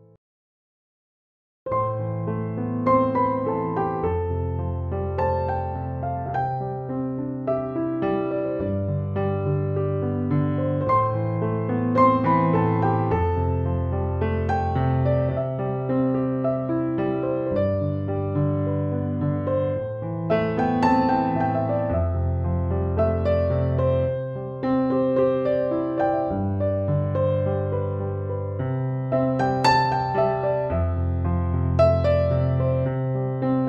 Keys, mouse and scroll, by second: 0.0-33.6 typing, 0.0 ctrl+c, 1.2 ctrl+w, 2.0 click, 2.6 ctrl+v, 3.5 ctrl+[, 3.8 ctrl+-, 4.7 ctrl+t, 6.3-7.0 alt+click, 7.4 right click, 8.7-11.1 drag, 12.0-13.0 alt+drag, 19.8 click, 22.8 click, 25.9 ctrl+a, 26.3 ctrl+c, 26.6 ctrl+w, 27.9 click, 28.5 ctrl+v, 29.5 ctrl+t, 30.1-31.1 alt+drag.